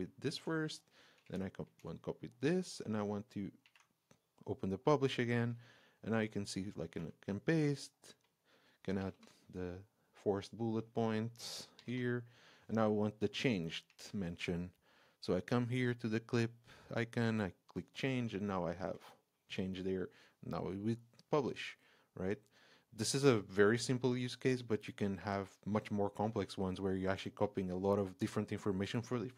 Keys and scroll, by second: 0.2 super+c, 1.2 super+a, 1.6 super+c, 3.6 alt+3, 6.9 super+v, 9.1 space, 11.8 space, 13.9 shift+Return, 18.8 super+v.